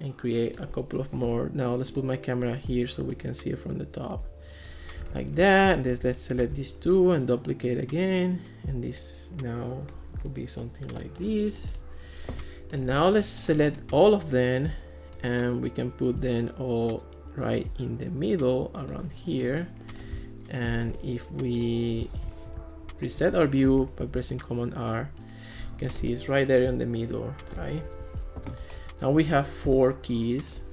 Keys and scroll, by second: 6.4 super+d, 22.2 alt+p.